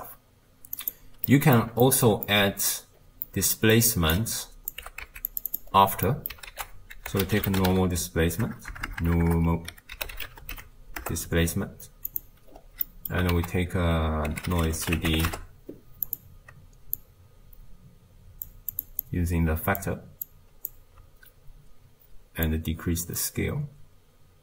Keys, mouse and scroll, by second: 0.8-4.7 drag, 5.5-11.1 drag, 11.1 BackSpace, 15.4 ctrl+a, 18.5 click, 19.9 click, 22.7-24.4 shift+drag.